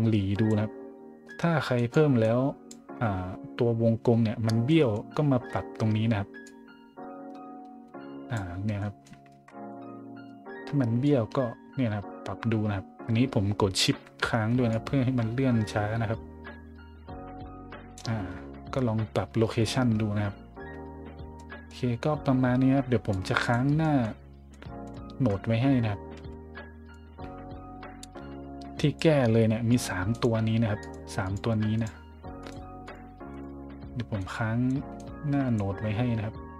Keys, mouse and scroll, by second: 1.7 click, 2.2 click, 3.1 scroll up 2, 4.7 middle click, 5.1-5.5 scroll up 2, 6.4-8.3 drag, 8.8 middle drag, 9.3 ctrl+z, 9.7 middle drag, 10.0 scroll up 1, 11.0-13.8 shift+drag, 14.7-17.9 shift+drag, 20.3 scroll down 2, 21.0 scroll up 1, 21.4 middle click, 21.9 middle click, 23.1 click, 23.8 middle click, 24.1 middle click, 24.5 middle click, 24.9 middle click, 26.1 a, 26.9-28.9 drag, 29.7 click, 30.1 click, 30.8 click, 31.2 click, 31.7 click, 32.4 click, 32.8 click, 33.3 click, 34.1-34.7 drag, 34.9 click, 36.2 scroll up 1.